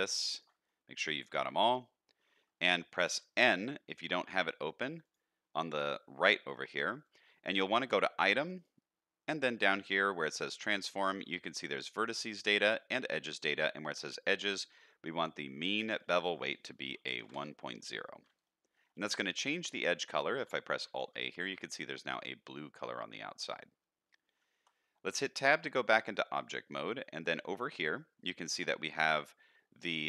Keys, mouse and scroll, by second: 0.3 alt+shift+click, 0.6-2.2 middle drag, 3.1 n, 5.0 click, 7.0 click, 8.5 click, 15.9-17.3 drag, 18.4 shift+middle click, 18.9 middle click, 19.3-20.3 scroll up 2, 20.8 alt+a, 21.2 shift+middle click, 23.9-24.3 scroll down 1, 24.5 Tab, 25.3 shift+middle drag, 25.6 scroll down 2, 25.9 middle click.